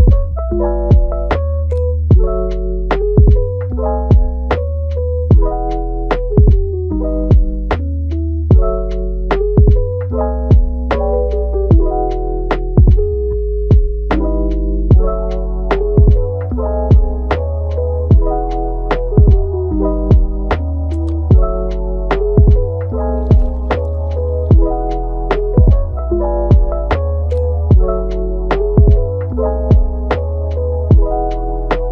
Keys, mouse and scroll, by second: 1.3-2.3 middle drag, 2.3 click, 2.4 g, 3.1 click, 3.3 g, 4.2-5.0 middle drag, 5.0 click, 5.3 g, 6.1 click, 6.3 g, 7.0-7.8 middle drag, 7.8 click, 8.0 g, 9.3-10.2 middle drag, 10.2 click, 10.6 g, 12.1-13.1 middle drag, 13.1 Tab, 13.4 click, 13.9-14.6 middle drag, 14.6 click, 15.0 g, 15.4 click, 15.8 g, 16.7-17.2 middle drag, 17.2 g, 18.1 click, 18.3 g, 19.7 click, 20.1 g, 21.0 click, 21.2 g, 22.0-23.2 middle drag, 23.2 Tab, 23.4 click, 24.3 Tab, 24.6-25.2 middle drag, 25.2 click, 25.8 g, 26.8 click, 27.1 z, 28.4 Tab, 28.8 click, 31.6 click.